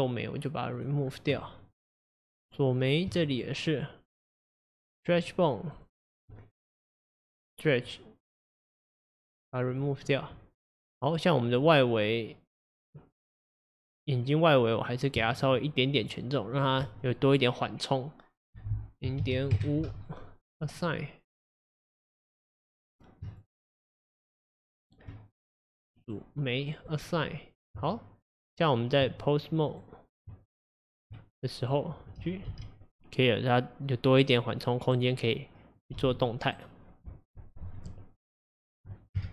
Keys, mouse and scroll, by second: 3.4 shift+click, 3.7 shift+click, 4.2 shift+click, 4.9 shift+click, 5.3 shift+click, 5.8 shift+click, 6.0 shift+click, 8.5 scroll up 1, 9.2 drag, 9.8-11.6 drag, 13.2-13.9 scroll down 5, 13.9 click, 14.8 click, 15.4 shift+click, 16.0 shift+click, 16.6 shift+click, 18.5-22.0 drag, 22.6 click, 23.4 shift+click, 23.9 shift+click, 24.7 shift+click, 26.1 click, 26.9 click, 27.8 Tab, 29.7 click, 30.3 Tab, 31.7 click, 32.6 g, 35.8 click, 36.1 g, 38.7-39.2 scroll down 2, 39.2 KP_0.